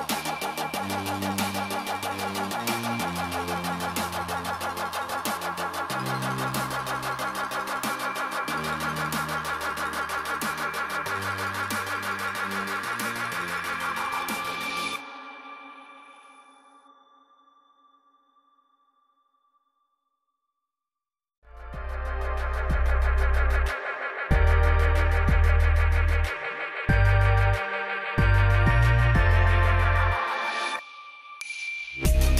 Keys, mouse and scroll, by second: 10.2 right click, 10.7 click, 21.0 alt+click, 28.7 click, 32.2 alt+click.